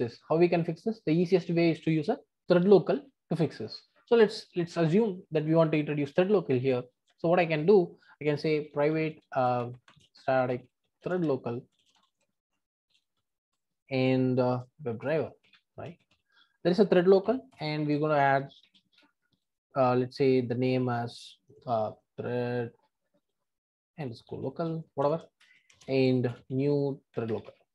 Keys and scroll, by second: 13.5 Return, 17.5 Return.